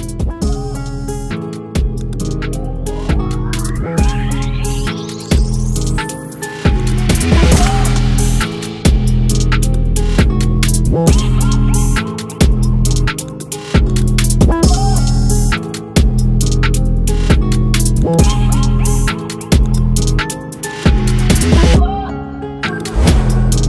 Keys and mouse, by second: 4.8-6.8 alt+drag, 18.6-21.3 alt+drag.